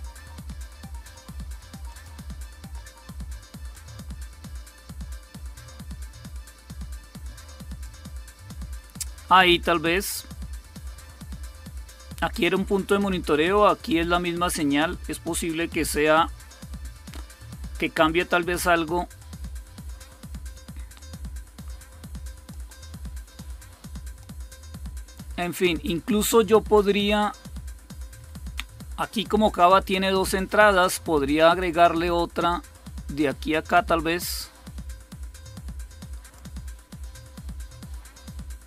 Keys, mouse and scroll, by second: 1.8 click, 3.6-8.4 drag, 19.1-20.7 drag, 20.9-22.7 drag, 23.3 click, 32.6 click, 34.2-36.9 drag.